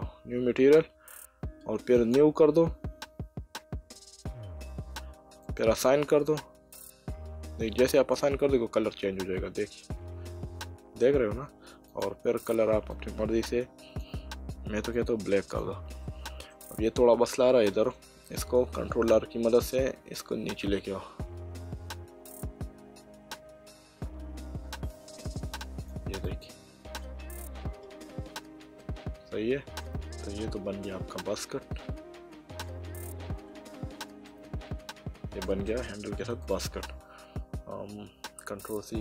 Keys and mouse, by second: 2.0 click, 5.4 click, 9.4 middle click, 11.9 click, 14.9 click, 16.0 middle click, 17.3 middle click, 19.1 ctrl+r, 19.6 click, 26.2 click, 28.8 middle click, 30.5 Tab, 34.3 middle click, 36.4 click.